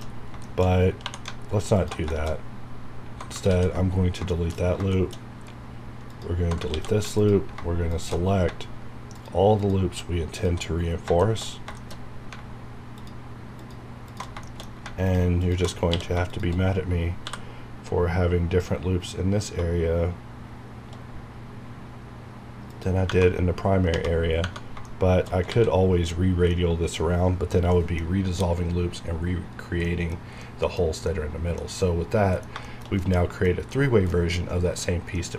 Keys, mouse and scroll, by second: 0.1 scroll up 1, 0.4 shift+middle click, 0.6 shift+scroll up 1, 1.0 2, 1.7 alt+click, 2.3 shift+scroll up 2, 3.4 ctrl+x, 3.9 scroll down 1, 4.3 shift+middle click, 4.6 scroll up 1, 4.9 shift+middle click, 5.1 shift+scroll up 1, 6.1 alt+click, 6.7 ctrl+x, 7.1 ctrl+alt+click, 7.9 ctrl+alt+shift+click, 8.2 ctrl+shift+scroll down 1, 9.1 ctrl+alt+shift+click, 10.8 ctrl+scroll down 1, 11.2 ctrl+shift+middle click, 11.6 ctrl+scroll down 1, 11.8 ctrl+shift+middle click, 11.9 ctrl+shift+scroll up 2, 13.0 ctrl+alt+shift+click, 14.4 ctrl+shift+middle click, 15.0 click, 15.9 ctrl+q, 16.2 click, 17.2 ctrl+b, 19.5 ctrl+b, 22.7 click, 23.0 ctrl+Tab, 24.3 ctrl+scroll down 1, 24.8 ctrl+shift+middle click, 25.7 ctrl+scroll down 1, 26.5 ctrl+middle click, 27.3 scroll up 1, 27.7 ctrl+middle click, 28.4 ctrl+scroll up 1, 29.8 ctrl+middle click, 30.0 ctrl+scroll down 1.